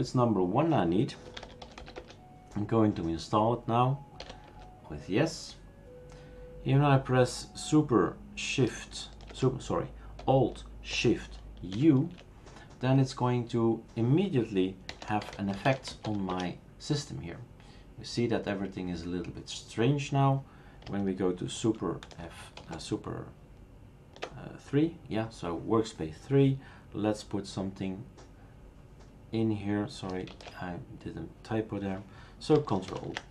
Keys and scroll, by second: 1.0-2.3 typing, 4.2 typing, 4.4 Return, 11.7 alt+shift+u, 14.7-16.5 typing, 22.0 super+F2, 22.7 super+", 30.3 shift+super+q, 32.9 ctrl+alt+t.